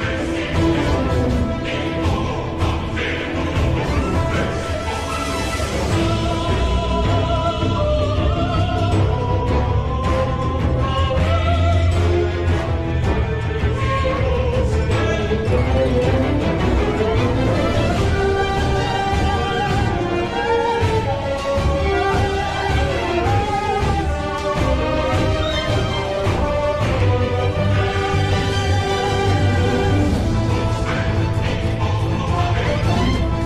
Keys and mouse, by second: 2.9 g, 10.9 z, 12.1 Tab, 13.4 middle click, 14.8-17.7 middle drag, 18.2-21.1 shift+middle drag, 21.6 click, 25.0 click, 26.1 click, 27.2 click, 28.4 middle click, 29.6 KP_7, 30.4 shift+middle click, 33.1 Tab.